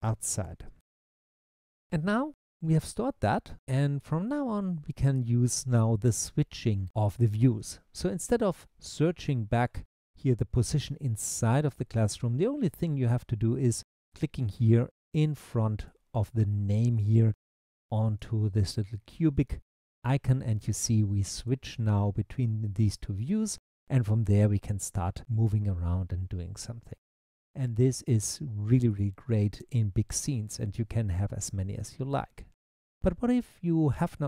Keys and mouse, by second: 15.9 click, 17.0 click, 18.1 click, 19.6 click, 21.4 click, 22.4 click, 23.8-25.4 middle drag, 25.7-28.9 middle drag, 28.9 click.